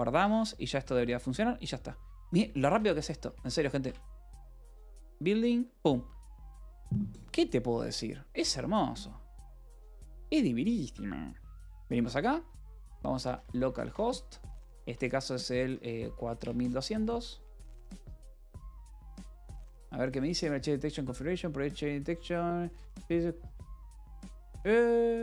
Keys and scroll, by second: 0.0 ctrl+s, 0.7 alt+p, 0.8 alt+w, 3.1 ctrl+c, 3.3 Up, 3.7 Return, 12.9-17.8 typing, 18.2 Return.